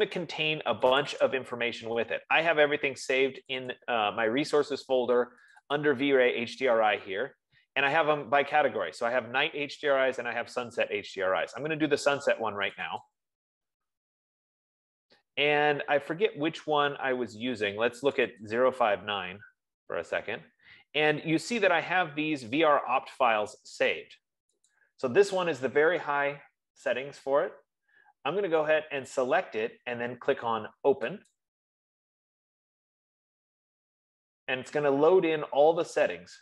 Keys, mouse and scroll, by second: 1.7 click, 2.0 click, 4.0 click, 4.2 click, 5.9 click, 6.4 click, 14.2-24.0 drag, 24.2-30.2 drag, 32.0-36.4 drag.